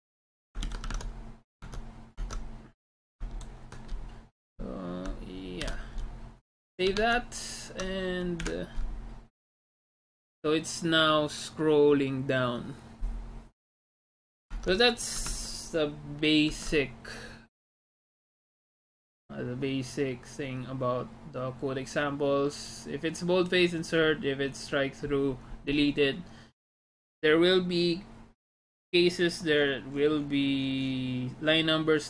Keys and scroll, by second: 0.7 ctrl+c, 1.0 alt+Tab, 1.8 alt+Tab, 2.2 alt+Tab, 3.4 ctrl+v, 5.7 ctrl+s, 7.2 alt+Tab, 8.5 F5, 15.5 alt+Tab, 17.5 alt+Tab.